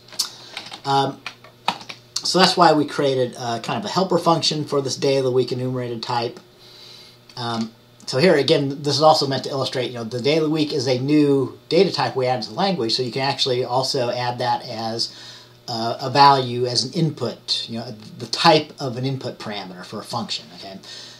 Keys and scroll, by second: 0.7 typing, 1.8 ctrl+s.